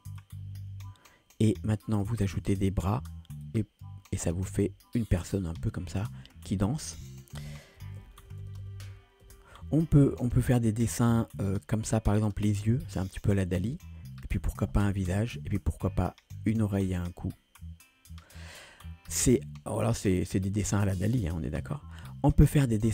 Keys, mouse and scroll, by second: 0.2 click, 1.8 click, 2.6 click, 3.4 click, 4.5 click, 8.0 ctrl+z, 8.2 ctrl+z, 8.4 ctrl+z, 8.6 ctrl+z, 8.9 ctrl+z, 9.3 ctrl+z, 10.5-18.6 drag, 21.6 ctrl+z.